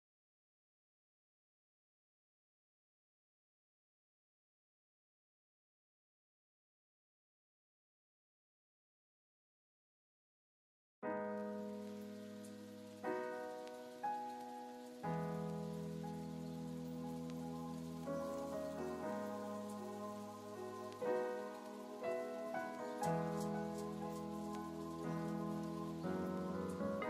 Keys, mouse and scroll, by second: 0.0 click, 2.0 click, 2.8 click, 3.5 click, 3.7 click, 4.5-8.8 middle drag, 8.8-12.4 drag, 19.5 click, 19.7 click, 19.9 click, 21.7-25.8 middle drag.